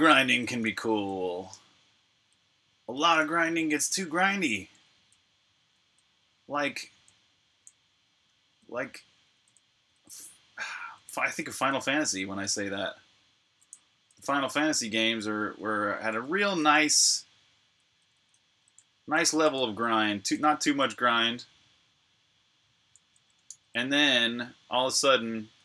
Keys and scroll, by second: 0.0-12.4 typing, 14.3-17.4 typing, 19.9-20.7 typing, 23.2-25.6 typing.